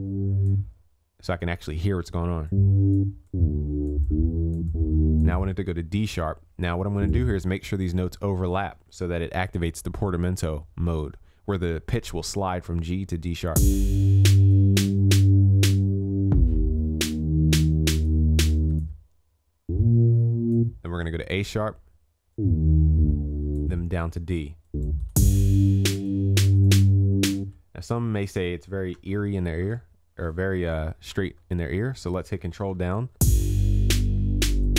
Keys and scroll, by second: 9.1 ctrl+s, 28.9 ctrl+s, 29.5 ctrl+a, 31.1 ctrl+j, 32.8 ctrl+s.